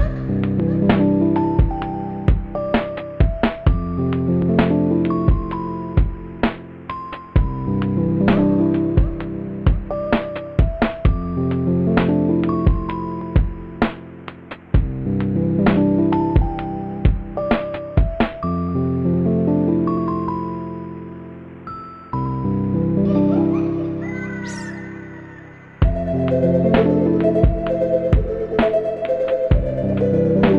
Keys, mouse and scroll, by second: 6.9 ctrl+z, 7.1 right click, 7.2 right click, 11.6 right click, 12.8 ctrl+-, 12.9 ctrl++, 13.6 space, 13.9 space, 14.2 space, 15.3 ctrl+-, 15.8 ctrl++, 16.3 space, 17.2 ctrl++, 17.9 space, 18.8 space, 19.0 space, 19.5 ctrl++, 19.8 ctrl+-, 20.1 space, 20.3 space, 20.5 space, 20.6 ctrl+-, 21.2 space, 21.6 right click, 24.0 b, 24.7 ctrl+z, 25.1 ], 26.5 ctrl+z, 26.7 b.